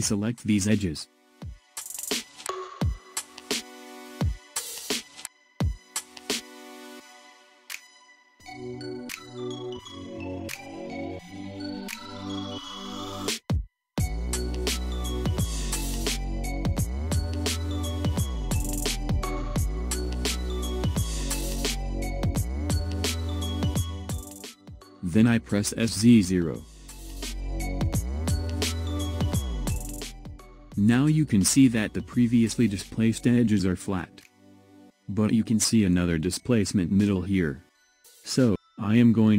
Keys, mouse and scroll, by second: 0.8 click, 3.4 middle click, 5.0 ctrl+click, 5.4 middle click, 6.0 ctrl+click, 6.3 middle click, 7.0 ctrl+click, 7.3 middle click, 8.1-9.8 scroll up 1, 9.8-12.9 drag, 12.9-13.5 scroll down 2, 13.5-16.7 middle drag, 25.0 s, 32.4-33.1 scroll up 1, 33.1-33.7 scroll up 1, 33.7-36.5 middle drag.